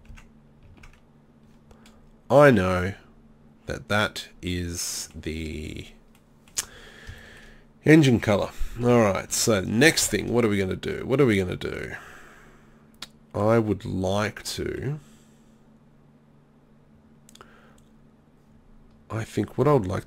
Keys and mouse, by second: 0.1 Tab, 0.7 Tab, 4.6 middle click, 9.5 middle click, 13.9-20.0 middle drag.